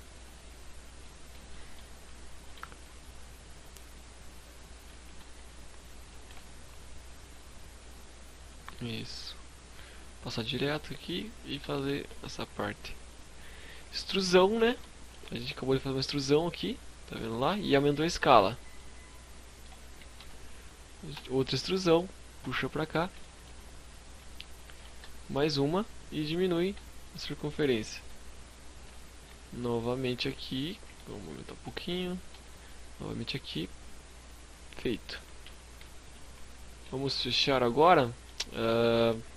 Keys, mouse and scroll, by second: 0.6 shift+middle click, 1.1-1.5 scroll up 2, 1.5 g, 3.9 shift+click, 4.1 s, 5.2 click, 5.2 g, 7.4 shift+click, 7.6 shift+scroll up 1, 7.7 shift+middle click, 8.8 click, 10.7 e, 10.9 right click, 11.2 s, 12.6 click, 12.8-13.3 scroll up 4, 13.2 shift+middle click, 13.9-14.3 scroll up 2, 15.4 middle click, 16.8 KP_Decimal, 17.8 middle click, 19.1 KP_3, 20.1 e, 20.4 right click, 21.0 click, 21.9 scroll down 3, 22.1 shift+middle click, 22.8 click, 23.9 e, 24.2 right click, 24.6 click, 25.7 s, 26.5 click, 27.1 shift+click, 28.2 click, 29.8 s, 30.6 click, 31.3 e, 31.6 right click, 31.9 click, 33.7-34.0 scroll down 3, 34.0 middle click, 34.6 KP_Decimal, 34.9 KP_5, 35.1 z, 35.9 shift+middle click, 35.9 scroll down 2, 36.4 middle click, 39.1 middle click, 39.2 shift+middle click.